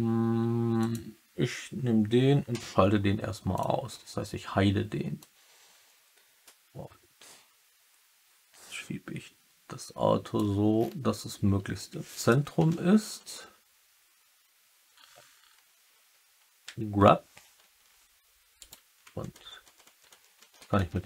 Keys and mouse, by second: 2.4 h, 4.9-5.6 typing, 5.1-10.3 drag, 13.1 Right, 16.6 g, 19.0 Right, 19.3 Right, 19.6 Right, 20.3 Right, 20.3 Left, 20.5 Left.